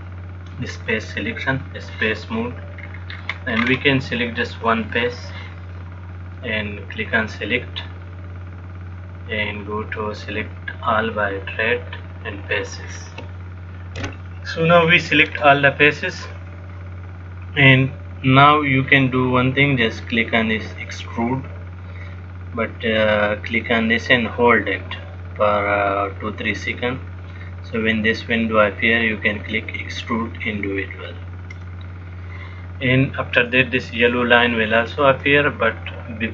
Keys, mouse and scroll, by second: 1.0 click, 3.0-3.8 scroll down 3, 3.4-4.5 scroll up 8, 5.1 click, 7.4 click, 15.0-18.5 scroll down 6, 24.1 click.